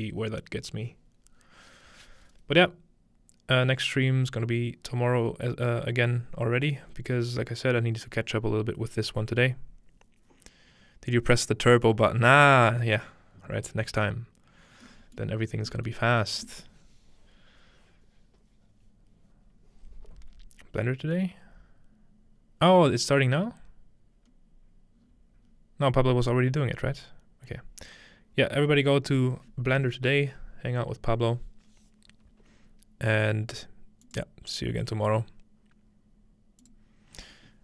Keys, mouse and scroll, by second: 14.8 middle click, 16.8 middle click.